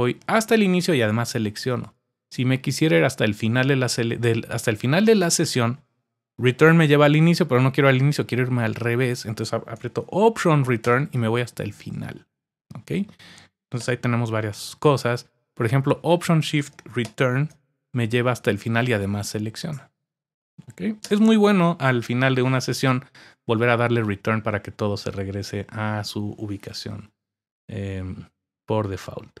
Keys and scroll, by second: 10.8 alt+Return, 13.8 Return, 17.0 alt+shift+Return, 21.0 Return.